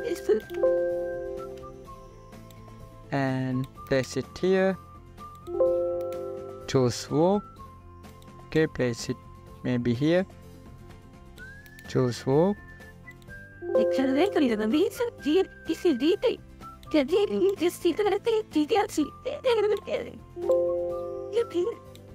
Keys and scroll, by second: 2.9 ctrl+t.